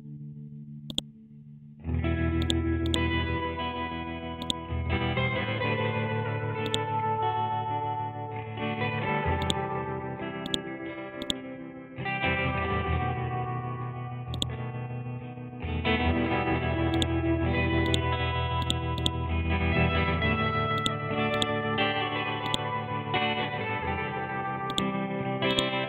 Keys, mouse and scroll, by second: 5.3 ctrl+z, 6.6-10.4 drag, 12.1-13.1 scroll up 1, 13.1 scroll down 1, 14.3 click, 16.9 ctrl+click, 19.4 ctrl+z, 19.9 scroll up 1, 20.7-24.7 drag.